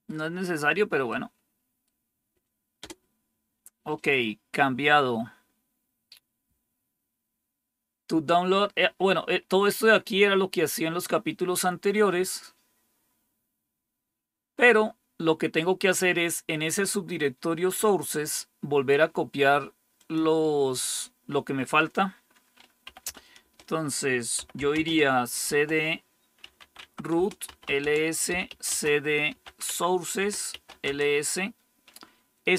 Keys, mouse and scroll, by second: 1.0 right click, 2.7 Return, 4.6-5.6 scroll down 2, 5.6-8.1 scroll down 1, 9.4-19.9 scroll down 1, 19.9-22.8 drag, 22.5-31.3 typing, 27.1 Return.